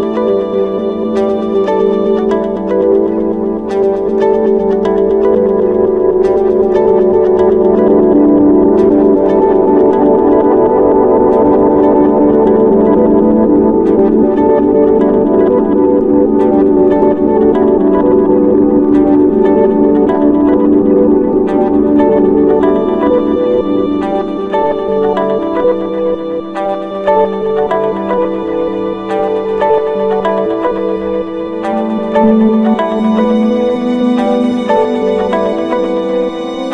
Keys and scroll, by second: 1.3 ctrl+-, 2.5 ctrl+=, 8.5 ctrl+-, 11.8 ctrl+space, 18.0 ctrl+z, 20.1 ctrl+=, 20.3 ctrl+space, 20.7 ctrl+-, 27.2 ctrl+z, 35.4 ctrl+z.